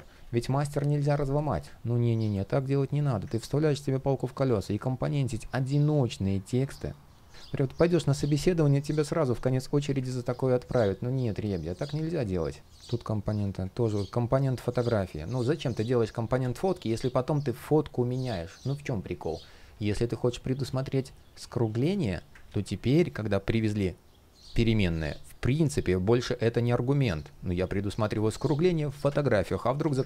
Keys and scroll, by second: 2.1 shift+o, 2.7 shift+o, 22.1 super+z, 28.6 super+z.